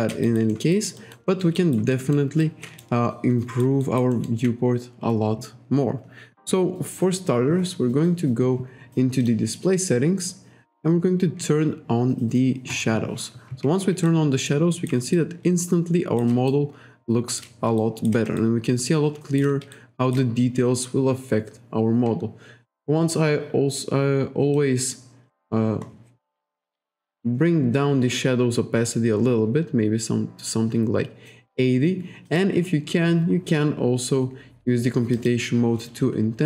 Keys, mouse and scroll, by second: 0.2 alt+right click, 0.7 alt+right click, 1.0 alt+click, 1.9 alt+middle click, 2.4 alt+right click, 2.8 shift+right click, 3.8 alt+right click, 9.2 click, 12.7 click, 14.1 alt+right click, 14.7 alt+right click, 15.1 shift+right click, 16.5 shift+right click, 17.8 shift+right click, 18.4 shift+right click, 19.7 shift+right click, 24.6 click, 25.2-25.6 scroll up 1, 25.8 scroll up 1, 27.0 click, 32.3 click, 35.2 click.